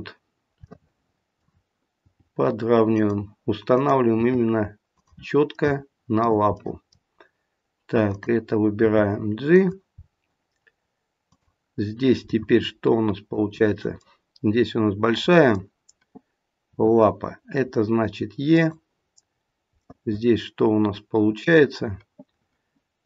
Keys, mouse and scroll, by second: 0.7 middle click, 2.0 g, 3.7 click, 4.1 g, 5.5 middle click, 6.5 middle click, 8.1 click, 8.8 g, 9.9-10.8 scroll down 1, 11.1 scroll down 1, 11.3 click, 12.3 middle click, 14.0 middle click, 16.7 e, 19.4-19.7 scroll down 1.